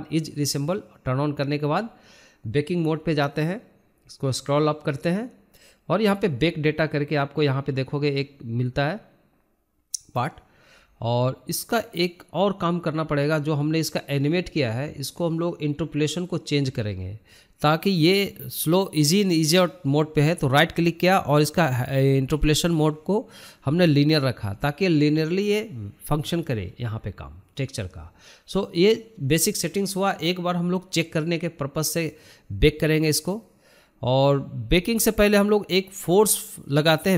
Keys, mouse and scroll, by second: 0.2 scroll up 1, 0.4-1.3 shift+middle drag, 1.3-1.8 scroll down 1, 1.8-2.1 scroll up 2, 2.1-2.7 scroll down 6, 2.7 scroll up 1, 2.8 scroll down 1, 3.4-6.1 scroll up 21, 6.1-7.0 scroll down 4, 8.8 shift+click, 11.2 click, 12.4-14.6 scroll down 7, 16.2 click, 19.5-21.5 right drag, 22.9-24.8 drag, 25.0-26.0 drag, 26.0 scroll down 3, 26.5-27.4 scroll up 13, 28.6 scroll down 2, 28.9 middle click, 29.2 scroll up 2, 29.5 shift+middle click, 30.1-30.9 shift+middle drag, 30.9 click, 31.1 scroll down 2, 31.4-32.2 middle drag, 32.2 shift+a, 35.9 scroll up 4, 36.2-37.1 shift+middle drag.